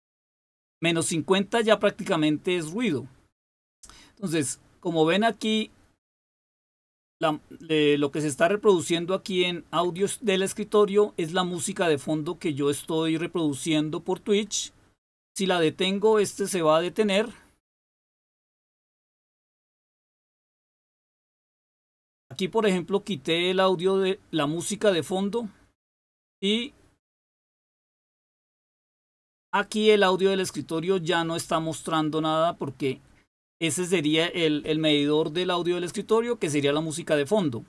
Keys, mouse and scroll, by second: 19.5-20.6 drag, 21.6 click, 24.8 click, 28.0 click.